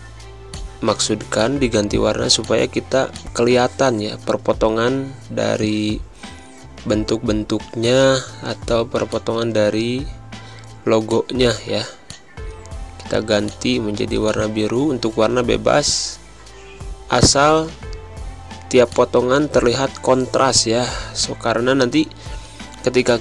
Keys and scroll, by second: 5.4 Down, 5.9 Up, 20.0 Right.